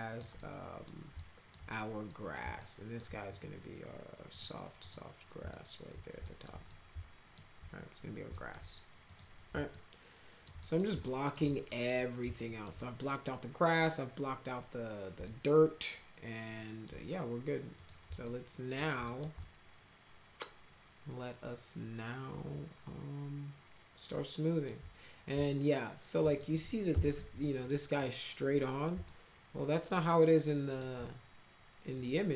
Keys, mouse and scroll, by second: 0.3 middle click, 1.1 alt+middle click, 2.0 middle click, 2.5 alt+middle click, 4.3 click, 4.7 click, 5.4 alt+middle click, 6.2 alt+middle click, 6.6 alt+middle click, 8.3 alt+middle click, 9.0 click, 9.7 alt+middle click, 10.6 middle click, 11.0 alt+middle click, 11.4 middle click, 11.9 middle click, 12.4 alt+middle click, 15.2-16.8 alt+middle drag, 17.7 click, 18.2 alt+middle click, 19.0 middle click, 19.4-24.6 alt+middle drag, 25.4 alt+middle click, 26.4 middle click, 26.6-27.6 typing, 27.4 middle click, 29.0-30.8 alt+middle drag, 31.9 click.